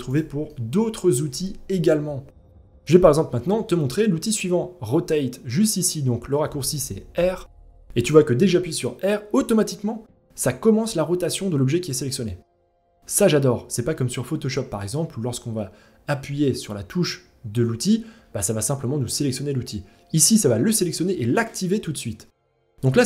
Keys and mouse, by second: 0.1-0.7 middle drag, 6.7 r.